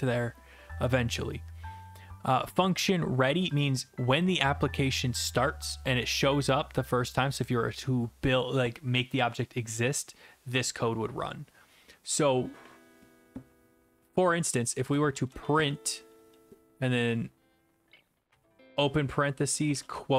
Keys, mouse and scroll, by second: 3.3 click, 4.2 click, 14.8 Return, 14.9-16.1 typing, 18.3 typing, 19.7-20.1 typing.